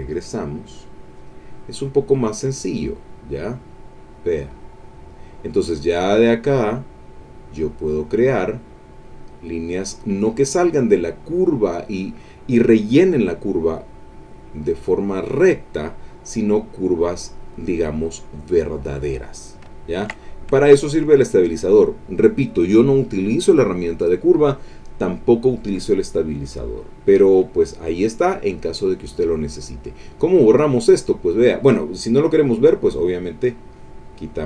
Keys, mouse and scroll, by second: 0.1 click, 1.2 click, 2.5-5.3 drag, 6.2-8.3 drag, 8.9-10.6 drag, 13.8-16.0 drag, 16.3-17.8 drag, 18.1-19.2 drag, 19.7 ctrl+middle click, 20.6 ctrl+middle click, 28.5 click, 32.4 click, 33.6 click.